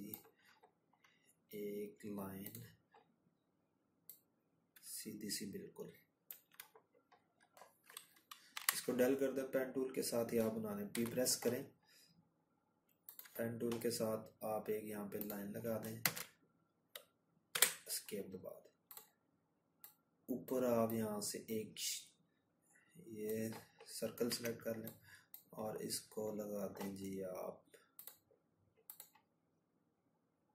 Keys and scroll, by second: 4.0 Delete, 6.4 p, 13.0 Escape, 19.8 z.